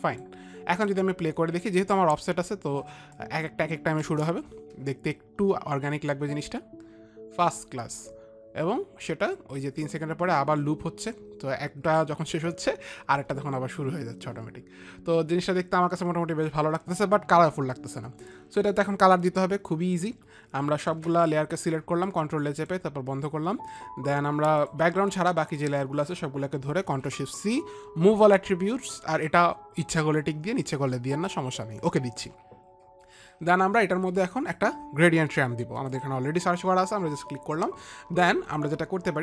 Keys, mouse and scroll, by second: 1.3 click, 2.6 click, 3.6 click, 4.5 click, 4.5 space, 21.3 ctrl+a, 23.1 ctrl+a, 23.1 click, 24.2 click, 25.9 shift+click, 27.6 ctrl+shift+c, 32.2 click, 34.3 click, 36.3 click.